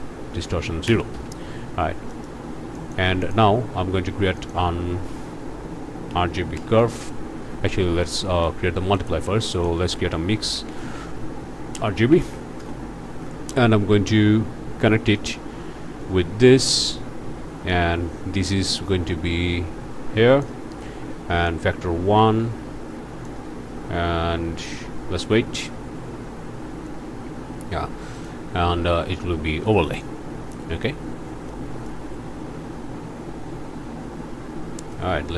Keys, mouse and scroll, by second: 0.3 Tab, 0.9 0, 1.1 Return, 2.1 click, 2.7 click, 3.2 shift+click, 3.8 shift+a, 4.4 shift+click, 6.1 r, 6.4 g, 6.5 b, 7.6 Escape, 8.2 click, 8.9 shift+click, 9.3 shift+a, 9.5 shift+click, 10.4 m, 10.5 i, 10.7 x, 11.7 Down, 12.1 Up, 12.6 Return, 15.2 click, 17.7-20.6 drag, 21.5-23.4 drag, 28.1 click, 29.9 click, 31.5 click, 34.9-35.3 drag.